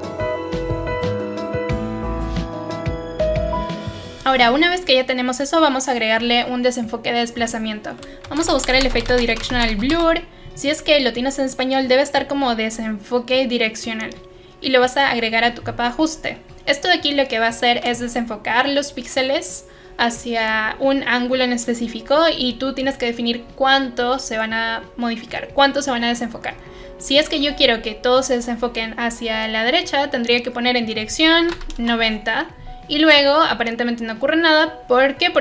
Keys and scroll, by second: 8.0-10.4 typing, 31.1-31.9 typing.